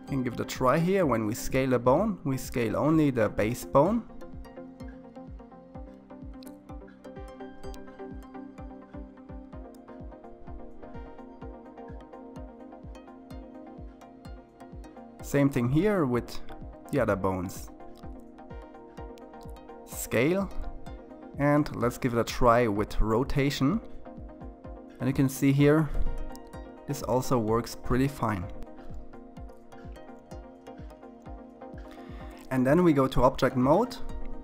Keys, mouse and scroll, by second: 8.8 click, 13.4 click, 15.1 s, 21.5 click, 23.5 r, 28.7 click, 29.2 r.